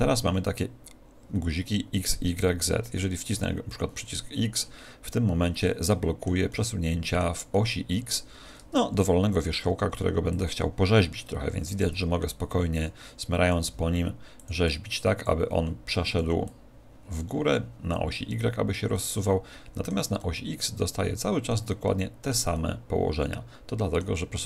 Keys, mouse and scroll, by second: 3.1 click, 5.5-9.3 middle drag, 8.7 Tab, 9.7 Tab, 10.3 click, 13.7 f, 14.4-18.3 drag, 15.5 f, 18.1-24.3 middle drag.